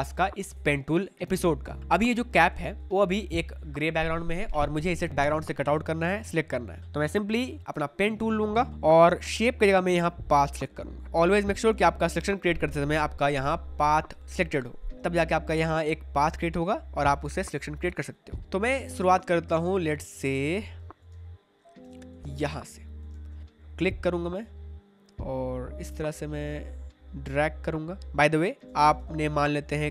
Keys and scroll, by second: 8.7 space, 14.9 space, 18.7 space, 26.4 space, 28.9 ctrl+z.